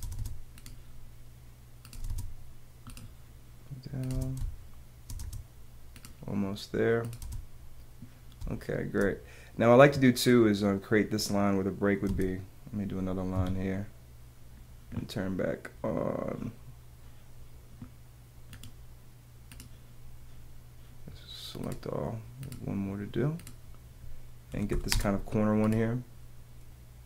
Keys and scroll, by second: 0.0 space, 0.6 space, 1.9 space, 3.0 space, 4.1 space, 5.2 space, 5.5 space, 7.2 space, 8.4 space, 12.0 space, 13.3 Escape, 24.5 p.